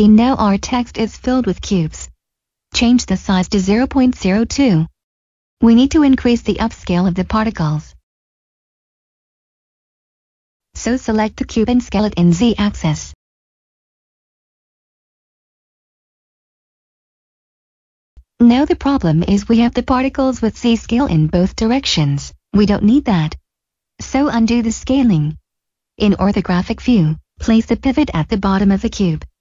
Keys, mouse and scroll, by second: 0.8 middle click, 2.5 typing, 2.6 Return, 4.1 shift+middle click, 4.6-5.0 scroll down 1, 5.0 middle click, 5.6 scroll down 1, 6.7 click, 7.5 middle click, 10.5 s, 11.0 z, 13.6 click, 14.1-15.3 scroll up 1, 15.5 shift+middle click, 19.5 shift+Num_Lock, 19.6 shift+middle click, 20.6-21.1 scroll down 1, 21.2 shift+middle click, 24.0 ctrl+z, 25.0 shift+middle click, 25.2 1, 26.3 right click, 28.3 click.